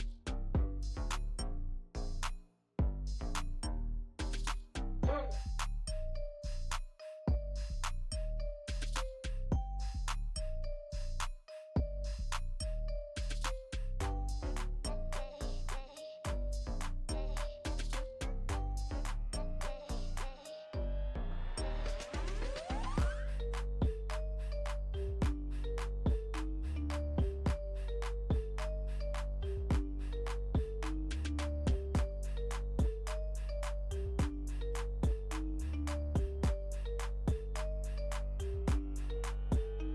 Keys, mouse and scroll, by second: 0.0 scroll, 0.0 typing, 0.1 alt+scroll up 1, 0.4-3.7 ctrl+drag, 3.7 scroll down 2, 4.9 space, 5.1 click, 5.4 space, 5.5 click, 5.6 space, 5.9 click, 6.1 space, 6.8-7.3 alt+scroll up 1, 7.8 space, 7.9 click, 8.3 space, 9.5-13.1 ctrl+drag, 13.1 alt+scroll down 1, 14.0 alt+scroll down 1, 14.1 space, 14.3 click, 14.6 space, 16.5-17.0 scroll down 2, 17.8 click, 17.9-19.8 ctrl+drag, 19.8 space, 19.9 click, 20.6 alt+scroll up 1, 21.4-22.0 scroll up 1, 22.0 space, 22.1 click, 22.5 space, 23.6-27.5 ctrl+drag, 27.5 space, 27.7 click, 28.1 space, 28.2 click, 28.4 space, 28.7-29.1 alt+scroll down 1, 29.7 space, 29.8 click, 30.4-30.8 alt+scroll down 1, 31.0 space, 31.1 click, 31.5 space, 33.3-36.4 ctrl+drag, 36.4 alt+scroll up 1, 37.9 scroll up 1, 38.2 space, 38.3 click, 38.9 alt+scroll up 1, 39.5 space, 39.5 click.